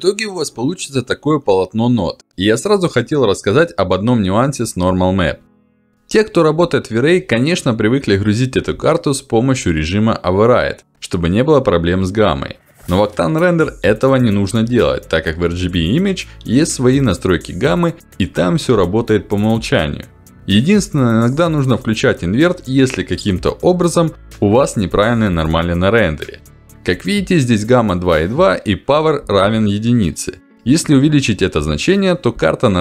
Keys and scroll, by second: 10.5 ctrl+alt+d, 24.6 ctrl+alt+d.